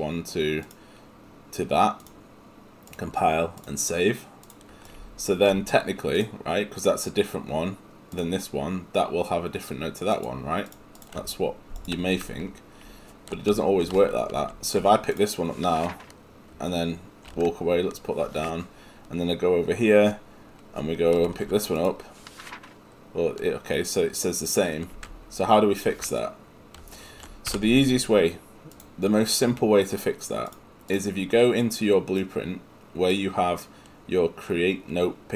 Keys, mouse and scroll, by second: 27.5 Escape, 30.5 click.